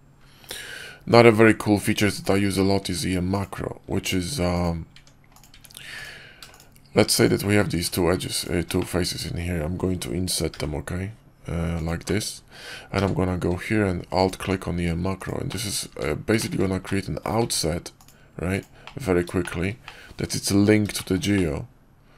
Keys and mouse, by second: 1.6 Tab, 2.7 Tab, 3.3 click, 3.8 Tab, 4.8 Tab, 5.4 Tab, 5.9 click, 8.7 middle click, 10.4 i, 11.9 click, 12.8 q, 15.4 click, 15.8 Tab, 16.3 shift+middle click, 16.7-17.2 middle drag, 17.3 q, 18.7 drag, 18.8 middle drag, 18.9 click, 19.3 shift+drag, 19.7 click, 20.1 Tab, 20.9 shift+click, 21.2 click.